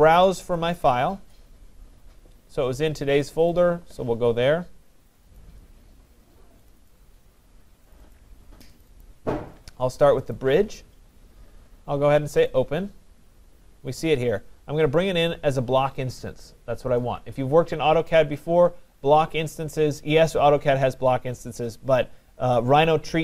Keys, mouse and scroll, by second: 0.7 click, 3.6 click, 5.2 click, 5.4 click, 6.7 click, 6.9 click, 8.0 click, 8.2 click, 8.9 click, 9.1 click, 10.4 click, 15.0 click.